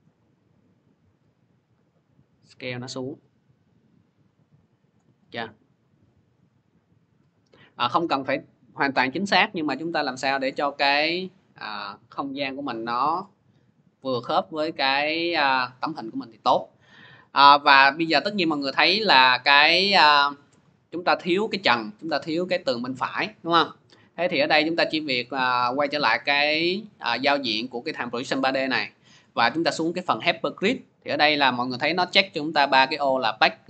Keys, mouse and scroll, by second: 4.7 click, 5.4 scroll, 6.9 scroll, 7.8-8.3 scroll, 10.3 click, 10.3 scroll, 11.6-12.8 scroll, 15.1 scroll, 16.4-16.9 scroll, 18.0 click, 18.4-19.4 scroll, 19.4 scroll, 25.6-30.7 drag.